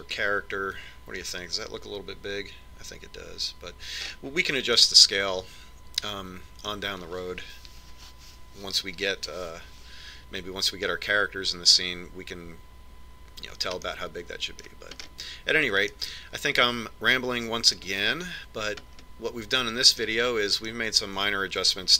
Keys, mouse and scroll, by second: 5.7-8.3 middle drag, 15.6-19.4 middle drag, 19.6-21.9 middle drag.